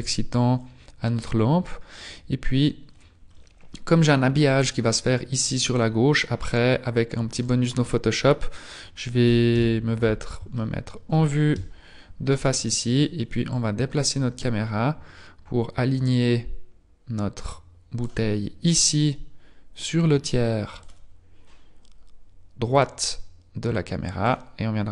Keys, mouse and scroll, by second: 0.8 scroll up 5, 2.8-3.1 scroll down 3, 5.6-6.0 scroll down 3, 6.5-7.4 scroll down 5, 7.4 right click, 9.5 KP_1, 10.6 shift+middle click, 11.5 KP_Decimal, 12.2-13.5 scroll down 4, 13.5 click, 19.6 click, 19.8 click, 23.5 click.